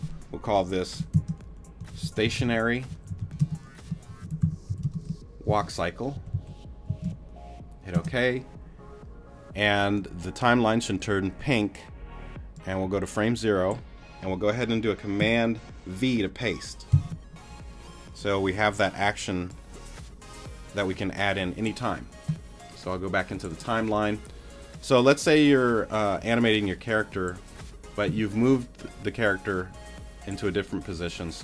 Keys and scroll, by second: 1.1-7.5 typing, 7.9 Return, 16.9 super+v.